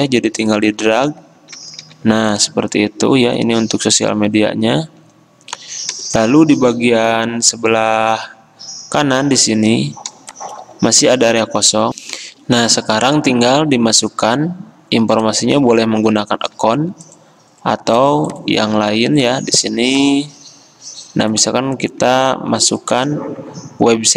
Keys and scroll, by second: 1.7 ctrl+d, 2.0 ctrl+d, 12.0 alt+Tab, 12.1 F10, 22.8 t.